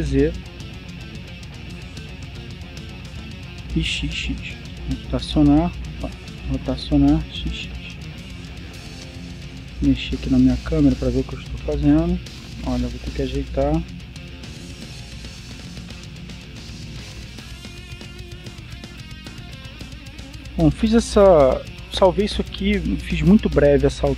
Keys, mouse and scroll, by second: 0.6 z, 3.5 click, 5.5 r, 6.8 Escape, 7.5 r, 8.2 x, 9.9 click, 10.3 middle click, 14.3 r, 15.2 z, 16.3 click, 16.6 middle click, 17.6 middle click, 20.3 middle click.